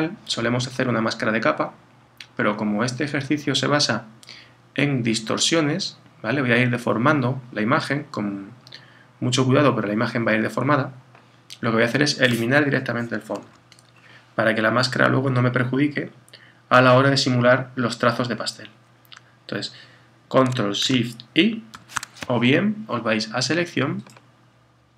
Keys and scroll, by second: 21.7 shift+super+i.